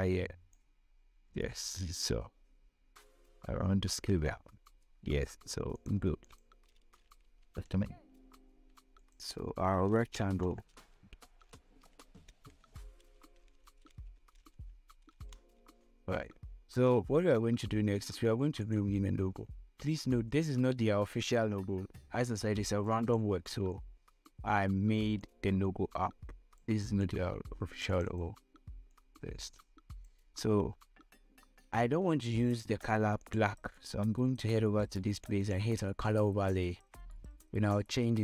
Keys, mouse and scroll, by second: 2.3-4.5 drag, 6.5 ctrl+click, 7.9 ctrl+g, 9.3 click, 10.4-15.1 typing, 15.2 Return, 18.9-25.6 drag, 25.6-32.7 drag, 33.5 click.